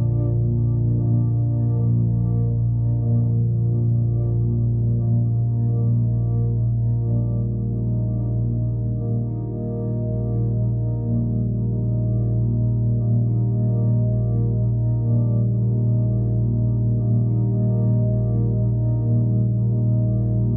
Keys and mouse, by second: 1.8-2.3 alt+drag, 2.8 ctrl+alt+click, 4.3-5.3 alt+drag, 9.0 click, 10.0 click, 11.8 click, 17.4-19.2 middle drag, 19.2-20.0 drag.